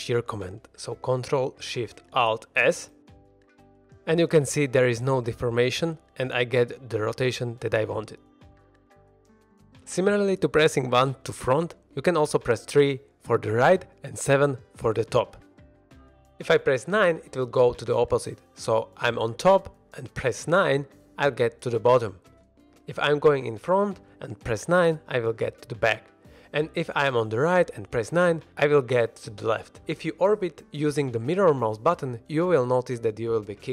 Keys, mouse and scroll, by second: 3.4 ctrl+alt+shift+s, 9.1 click, 9.9 KP_9, 9.9 KP_1, 12.7 KP_3, 14.3 KP_7, 20.6 KP_9, 22.2 KP_1, 23.9 KP_9, 24.9 KP_1, 25.4 KP_3, 28.0 KP_9, 30.9-32.7 middle drag, 32.7 middle click, 32.9-33.2 middle drag.